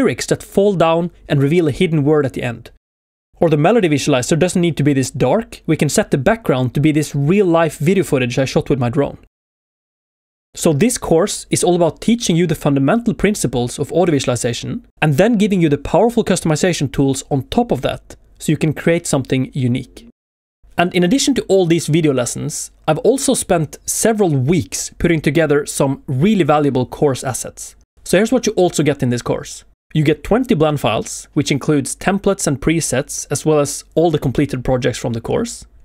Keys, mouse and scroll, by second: 15.1 shift+middle click, 15.1 right click, 15.1 scroll up 1, 17.0 scroll down 1, 18.2 scroll up 1, 18.6 shift+middle click, 19.8 scroll up 1, 22.8 ctrl+shift+click, 22.8-23.2 scroll down 2, 23.4 middle click, 24.1 ctrl+shift+click, 24.1 scroll down 1, 24.6 middle click, 25.4 scroll down 1, 33.5 shift+middle click, 33.5 scroll up 1, 33.6 space, 34.2 shift+middle click, 34.9 scroll down 1, 35.3 z, 35.7 shift+middle click.